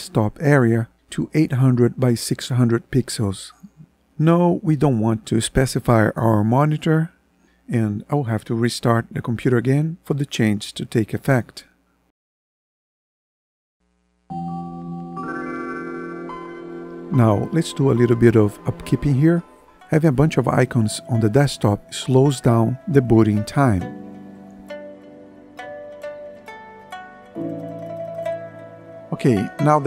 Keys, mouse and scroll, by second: 25.6 ctrl+End.